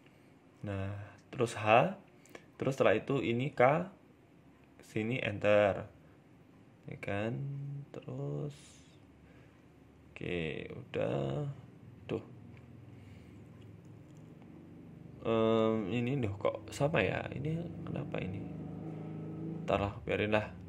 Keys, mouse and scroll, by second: 0.1 shift+middle click, 0.4-1.4 scroll up 2, 0.8 shift+middle click, 1.7 k, 5.3 alt+h, 5.8 middle click, 6.5 right click, 6.8 alt+shift+right click, 7.2 middle click, 7.7 scroll down 1, 7.9 s, 9.2 ctrl+z, 9.8 right click, 10.3 alt+shift+right click, 11.0 a, 11.1 a, 11.6 alt+shift+right click, 12.7 s, 13.7 middle click, 14.1 shift+middle click, 14.5 ctrl+r, 17.1 ctrl+r, 19.0 KP_1, 19.7-20.4 scroll up 4, 19.9 shift+middle click, 20.4 shift+middle click.